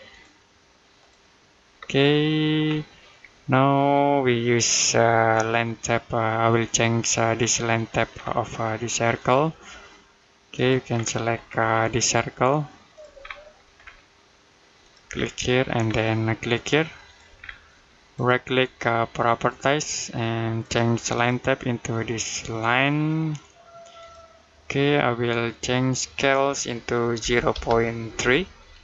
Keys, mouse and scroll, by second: 1.6-1.9 scroll down 1, 1.9 middle click, 2.5 scroll up 1, 3.1 middle click, 8.0 scroll up 1, 9.0 click, 10.8 scroll down 1, 11.0 middle click, 11.3-12.0 scroll up 1, 12.8 click, 13.0 scroll down 1, 13.2 middle click, 13.6-14.7 scroll up 1, 14.7 click, 15.0 scroll down 1, 15.2 middle click, 16.9 click, 17.2 scroll down 1, 17.5 middle click, 19.2 click, 23.8 click, 27.0 typing.